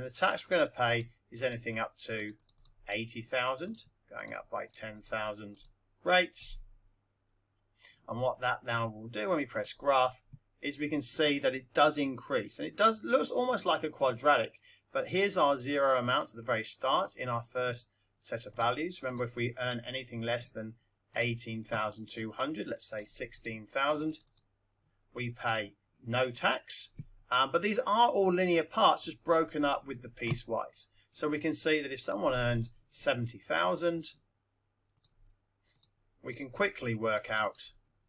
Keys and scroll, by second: 0.2 Return, 0.9 8, 1.3 0, 3.6 Return, 4.1 1, 4.6 0, 6.3 0, 21.1 1, 23.3 6, 23.9 0, 25.3 Return, 34.9 1, 35.7 7, 36.2 0.